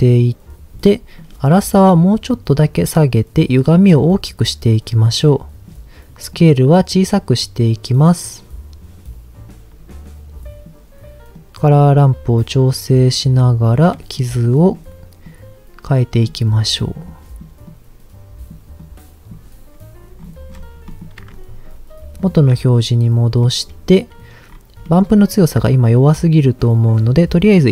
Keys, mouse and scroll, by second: 1.2-3.0 drag, 3.4-5.6 drag, 6.3-10.6 drag, 11.3 click, 11.9-13.6 drag, 13.9 click, 14.4 click, 15.2-16.2 drag, 17.0 click, 17.6 click, 18.8 click, 20.2-21.0 scroll down 4, 20.9 middle click, 22.1 ctrl+shift+click, 23.4 middle click, 24.5-25.5 scroll up 4, 24.8 middle click, 25.9 click, 27.5 middle click.